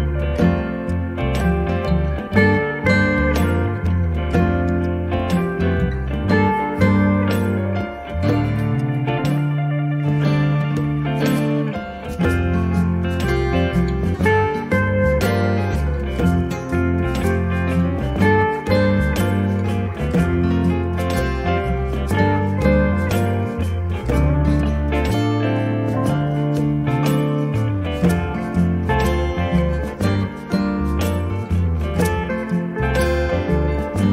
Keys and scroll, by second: 1.1 m, 7.5 space, 15.5 m, 19.8 space.